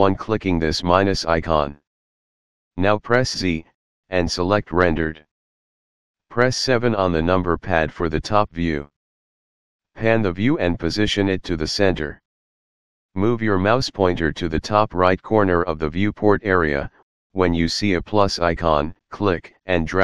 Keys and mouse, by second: 1.9 click, 3.7 z, 4.9 click, 6.8 KP_7, 10.9 shift+middle click, 14.9 click.